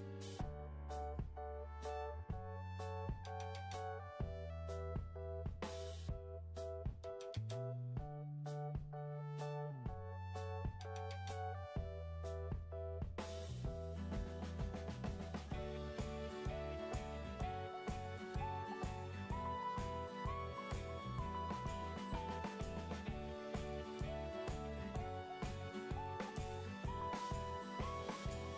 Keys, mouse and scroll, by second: 8.7-9.2 typing, 9.5 Return, 25.1-25.5 typing, 25.7 Return, 28.3-28.5 typing.